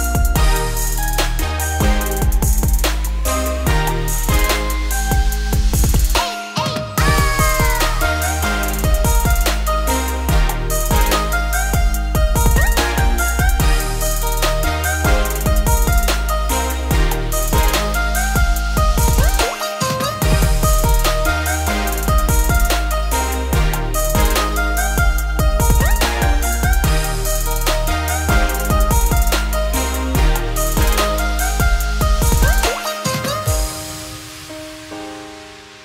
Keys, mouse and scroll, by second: 1.5-4.1 middle drag, 4.1 `, 4.9 scroll down 1, 5.1-8.0 middle drag, 8.0 ctrl+b, 13.3 Tab, 13.4 scroll down 1, 13.5-14.3 middle drag, 14.3-14.9 right drag, 14.9 scroll down 2, 15.1-16.7 middle drag, 16.7 click, 18.1-18.8 drag, 19.3-19.7 middle drag, 19.7 click, 20.0-20.6 middle drag, 20.6-22.5 scroll up 4, 22.5 click, 23.0 scroll down 2, 23.1-23.4 middle drag, 23.4 Tab, 24.3 ctrl+r, 28.9 middle click, 29.9 ctrl+r, 33.4 middle click, 33.9-34.9 scroll up 2, 34.9 alt+shift+click, 35.4 alt+shift+click.